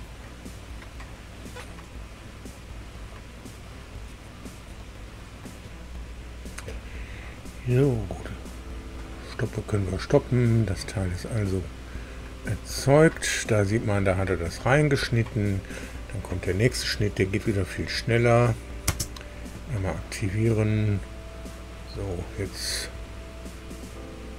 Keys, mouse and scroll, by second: 1.7 click, 8.3 click, 11.8 click, 12.8-14.3 drag, 14.3 middle click, 17.7 click, 18.8 space.